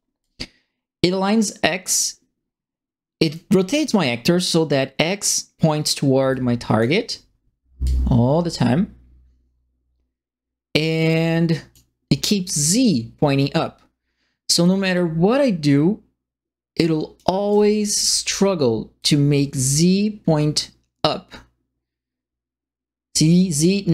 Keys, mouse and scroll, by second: 0.2-3.3 drag, 6.3 click, 7.8-11.7 drag, 14.6-17.1 drag, 17.2-18.0 typing, 17.4 right click, 18.9-23.9 drag.